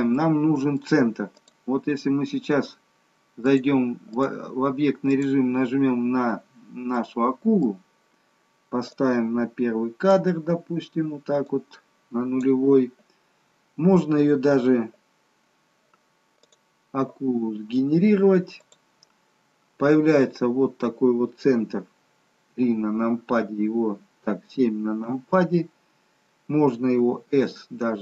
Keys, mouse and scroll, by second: 0.2 middle click, 1.4 click, 3.7 click, 5.3 click, 7.0 middle click, 9.0 click, 11.5 click, 13.7-14.5 scroll down 4, 16.7 click, 17.8 scroll down 2, 18.6 click, 22.5 KP_3, 25.2 KP_7, 27.1 s.